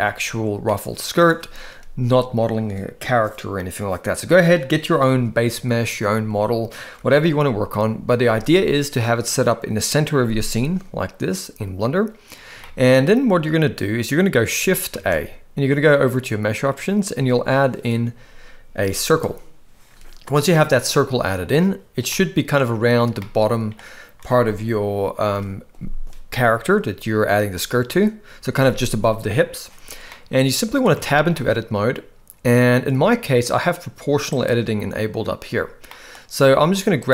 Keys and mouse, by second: 0.0 Tab, 0.7-1.2 middle drag, 7.0 KP_1, 12.6-13.0 shift+middle drag, 14.9 shift+a, 20.5-21.5 middle drag, 22.1-22.6 middle drag, 23.2-23.8 middle drag, 25.3 KP_1, 30.1-30.8 middle drag, 31.0 Tab, 31.4-32.6 middle drag, 34.3-35.4 drag, 36.0 middle click.